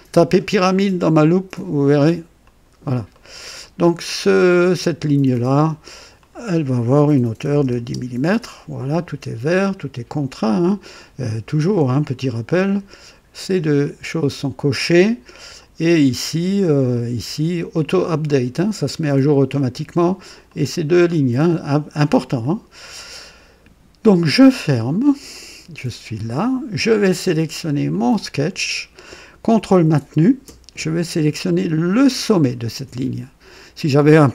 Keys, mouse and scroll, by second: 2.4 click, 3.1 right click, 5.0 click, 6.2 click, 7.3 KP_1, 7.4 KP_0, 7.7 Return, 12.7 click, 14.2 click, 15.5 click, 16.9 click, 19.1 click, 20.4 click, 22.4 click, 24.0 click, 25.3-26.4 drag, 27.9 click, 32.0 ctrl+click.